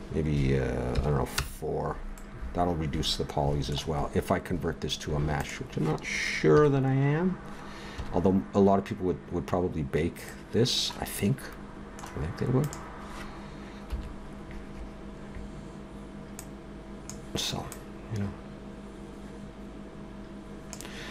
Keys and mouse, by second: 0.8 middle click, 2.2-5.3 middle drag, 5.3-6.5 right drag, 6.5 KP_3, 7.9 KP_1, 12.6-13.9 right drag, 13.9 KP_7, 14.8-16.4 middle drag, 17.6-19.6 middle drag.